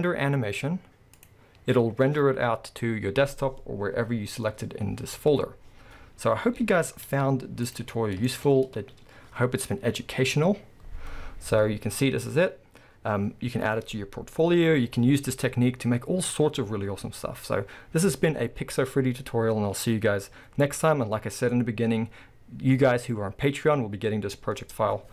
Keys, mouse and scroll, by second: 1.1-6.8 scroll up 1, 6.8-7.8 scroll up 1, 7.8 z, 8.3-11.8 shift+middle drag, 8.5-8.9 scroll up 2, 8.9 space.